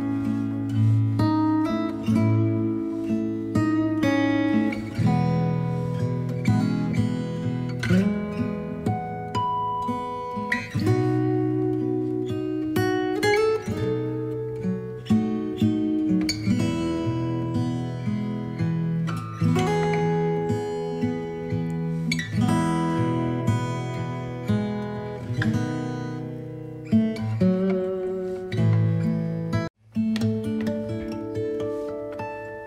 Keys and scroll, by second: 9.8 space.